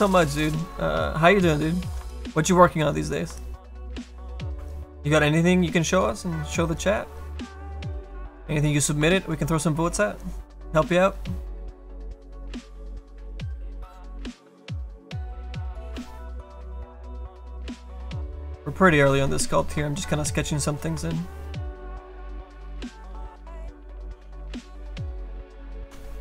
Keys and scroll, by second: 16.6 s, 25.7 s.